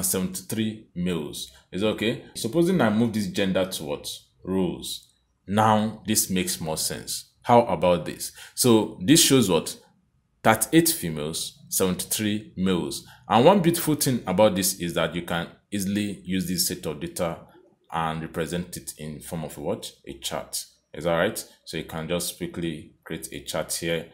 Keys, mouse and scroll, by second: 3.0 click, 13.8 click, 17.1 click, 19.6 click, 21.0 click, 22.6 click.